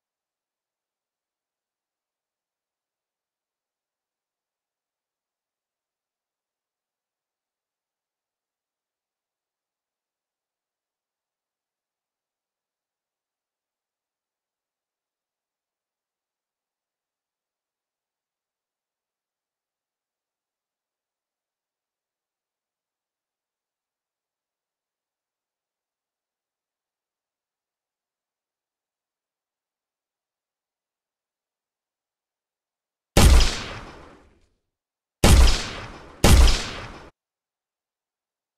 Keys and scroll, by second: 18.7 w, 28.3 w, 31.8 s, 32.5 d, 37.0 Escape.